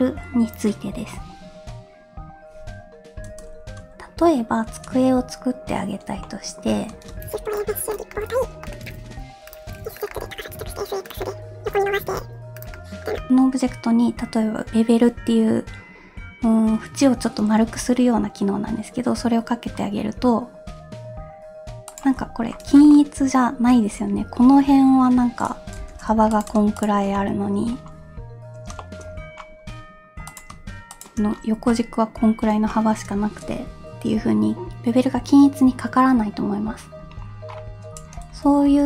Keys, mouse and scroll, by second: 6.2 middle click, 7.1 shift+a, 8.1 middle click, 8.2 scroll down 1, 8.6 middle click, 8.6 click, 8.6-10.5 typing, 10.1-10.5 middle drag, 11.2-12.0 middle drag, 12.0 s, 12.7 middle click, 13.2 middle click, 13.3 ctrl+b, 13.3 ctrl+z, 17.6 ctrl+b, 22.2-22.5 scroll up 2, 22.9-23.8 shift+middle drag, 25.8 2, 26.1 3, 26.3 click, 26.8 shift+click, 27.1-27.8 middle drag, 27.8 scroll down 2, 28.8 shift+middle drag, 29.0 scroll up 1, 29.6-30.2 scroll up 1, 30.2 click, 30.9 shift+click, 31.3-32.0 scroll down 2, 31.7-32.1 middle drag, 32.1 scroll up 2, 32.7-33.0 shift+middle drag, 37.0 Tab, 37.5-38.2 scroll down 2, 38.3 ctrl+z, 38.7 ctrl+z.